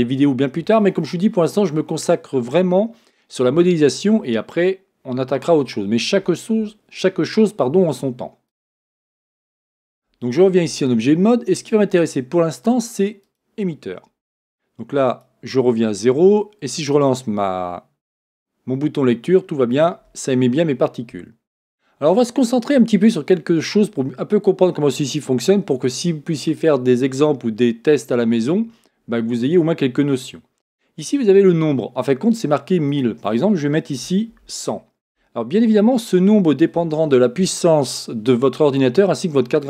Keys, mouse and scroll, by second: 8.5-13.3 drag, 15.0-18.5 drag, 19.7-39.6 drag, 34.4 KP_0, 35.2 Return.